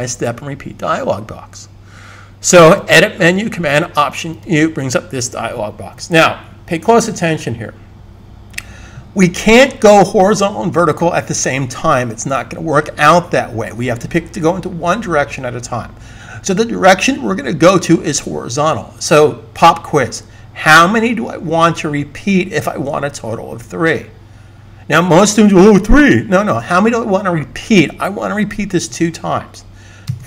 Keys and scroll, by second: 28.6 2.